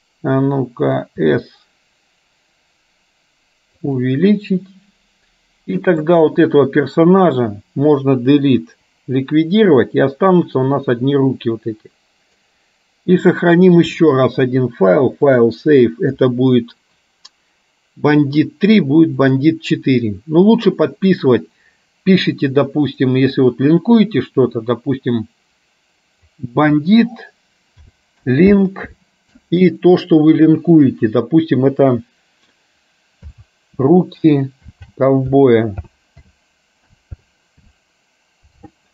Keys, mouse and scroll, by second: 1.3 s, 6.3 click, 8.7 Delete, 10.7-12.6 middle drag, 14.0-15.7 drag.